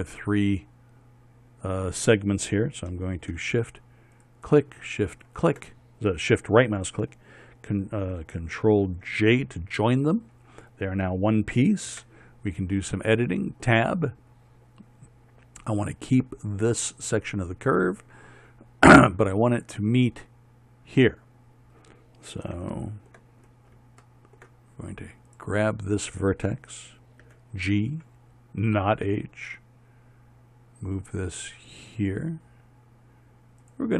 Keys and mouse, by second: 4.8-7.5 right drag, 9.8 ctrl+j, 12.5 Tab, 24.2 middle click, 24.8 middle click, 25.9-27.9 right drag, 27.9 g.